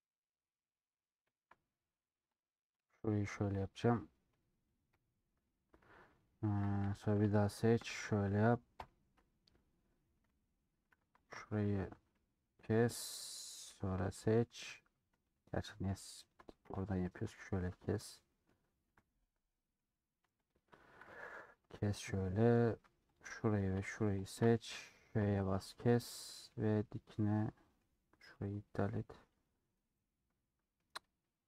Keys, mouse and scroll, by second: 0.0-1.5 middle drag, 1.5 scroll up 2, 1.7 middle click, 1.9 scroll down 1, 2.5 click, 5.0 ;, 5.3 scroll up 3, 6.1-6.5 scroll up 2, 6.9 c, 7.8 ctrl+KP_Add, 8.8 ;, 9.5 3, 12.3 click, 13.7 3, 13.9-17.3 alt+drag, 17.3 ;, 17.5 middle click, 18.4-18.7 scroll up 2, 18.9 3, 19.1-20.5 middle drag, 20.5 alt+click, 22.2 middle click, 22.6 3, 23.2-24.3 middle drag, 24.3 alt+shift+click, 25.2 ;, 25.4-26.4 middle drag, 26.4 2, 26.7-28.5 middle drag, 28.5 click, 30.0 scroll up 2, 30.5 middle click.